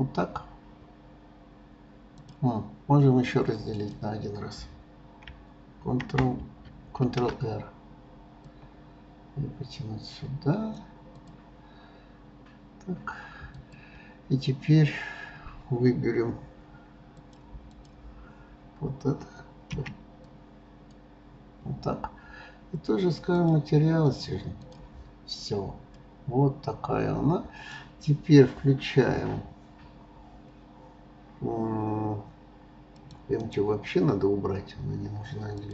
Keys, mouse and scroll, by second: 2.2 click, 3.7 click, 13.5 click, 17.2 click, 17.7 click, 23.3 click, 24.1 click, 24.6 click, 25.3-25.9 scroll down 2, 25.9-28.9 middle drag, 32.9 click, 33.4-35.7 right drag.